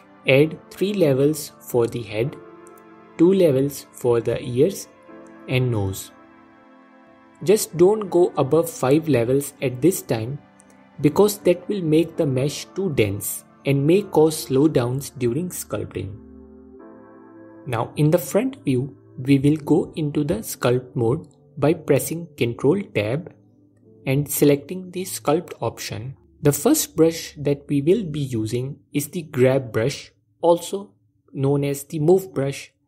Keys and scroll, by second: 15.7 KP_1, 18.2 ctrl+Tab, 19.5 ctrl+Tab.